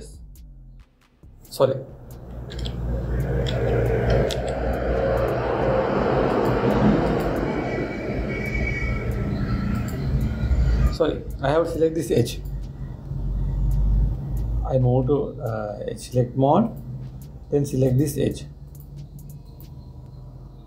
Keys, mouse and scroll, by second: 3.3 ctrl+z, 4.2 ctrl+z, 5.0 ctrl+z, 6.9 click, 7.7-13.1 drag, 17.3-18.7 drag, 19.3 click, 20.0 click.